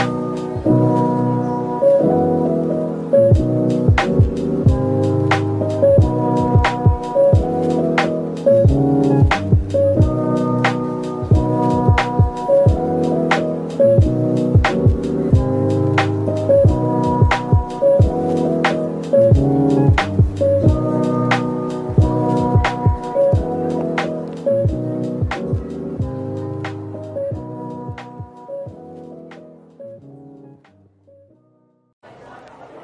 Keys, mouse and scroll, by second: 0.4 typing, 1.0 middle click, 4.2 scroll up 1, 5.3 middle click, 7.6 shift+click, 9.0 shift+click, 9.7-11.6 typing, 10.4 scroll up 1, 11.7 right click, 12.9 ctrl+z, 13.8 shift+click, 14.4 typing, 15.7 typing, 17.1-18.1 typing, 19.6-20.0 scroll down 1, 20.0 middle click, 23.9-24.6 scroll down 1, 24.6 typing, 25.0-25.3 scroll down 1, 26.3 typing, 26.4 shift+click, 26.8 shift+middle click, 29.7 typing, 31.0 typing, 32.3-32.8 typing.